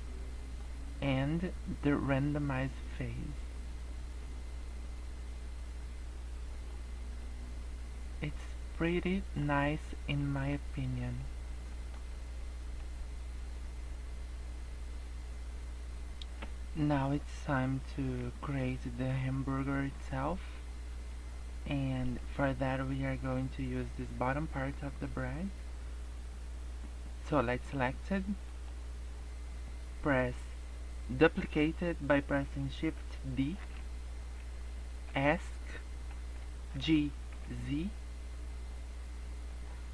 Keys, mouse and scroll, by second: 2.4 click, 7.2 middle click, 8.6 scroll up 1, 8.9 middle click, 9.6 scroll down 2, 10.2 middle click, 10.9 middle click, 11.2 scroll up 3, 11.7 middle click, 12.1 scroll down 1, 12.4 middle click, 16.1-18.9 scroll up 1, 20.9 scroll down 2, 21.2-22.0 scroll up 2, 22.1 middle click, 28.4 click, 33.6 shift+d, 36.6 g.